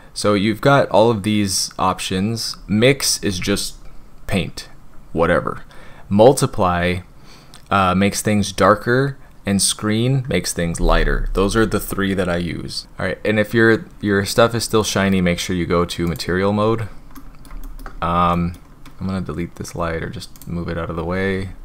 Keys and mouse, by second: 16.1 click, 17.1-17.4 middle drag, 17.6 shift+drag, 18.3 middle drag.